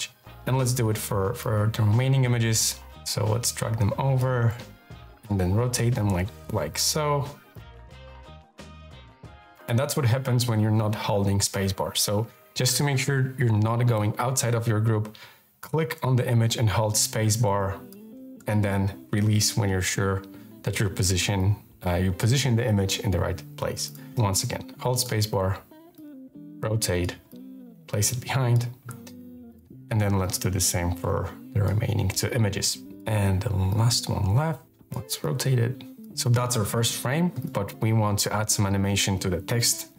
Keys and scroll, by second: 1.4 space, 11.5 super+z, 16.3 space, 24.0 space, 30.2 space, 33.6 space.